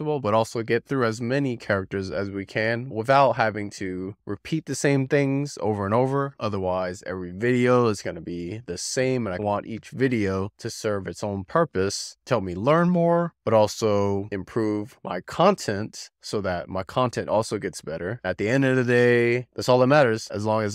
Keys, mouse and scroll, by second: 1.6-2.7 shift+middle drag, 3.1-3.4 scroll up 3, 3.4-4.0 middle drag, 4.5 middle click, 5.2-6.3 shift+middle drag, 6.7-7.0 scroll up 3, 7.0-7.7 middle drag, 8.8-10.0 shift+middle drag, 10.3-10.6 scroll up 3, 10.6-11.3 middle drag, 12.4-13.6 shift+middle drag, 14.0-14.3 scroll up 3, 14.3-14.9 middle drag, 16.1-17.2 shift+middle drag, 17.6-17.9 scroll up 3, 17.9-18.6 middle drag, 19.7-20.7 shift+middle drag.